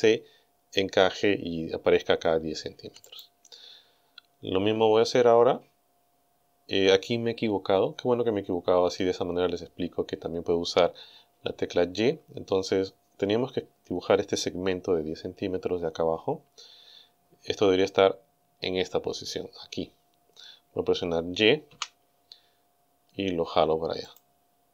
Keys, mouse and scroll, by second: 3.1 click, 21.7 g, 24.1 click.